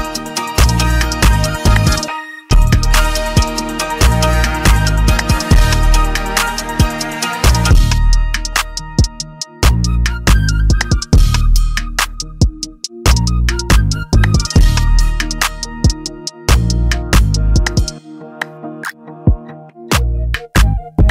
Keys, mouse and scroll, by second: 0.7 click, 2.6 click, 5.5 click, 13.4 click.